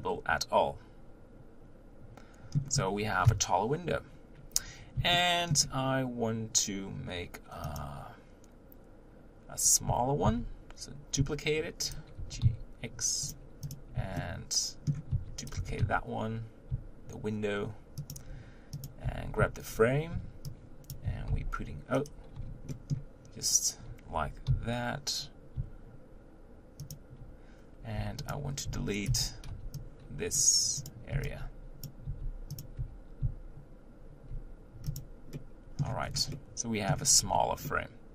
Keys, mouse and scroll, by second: 3.2 KP_1, 5.2-7.8 shift+middle drag, 7.8 click, 10.2 shift+d, 12.2 g, 13.7 click, 14.2-15.1 shift+middle drag, 15.1 shift+d, 15.5 g, 18.8 click, 19.1 Tab, 19.7 z, 20.9 b, 21.0 g, 22.9 b, 24.1 g, 28.0 Tab, 28.3 click, 28.9 b, 29.1 Tab, 30.4 b, 30.9 click, 31.8 b, 32.6 x, 32.8 Tab, 34.3 z, 35.0 click, 35.3-35.8 middle drag, 35.8 scroll up 1, 36.0-36.4 scroll down 1, 36.4-37.2 middle drag, 37.2-37.8 scroll down 1, 37.8-38.1 middle drag.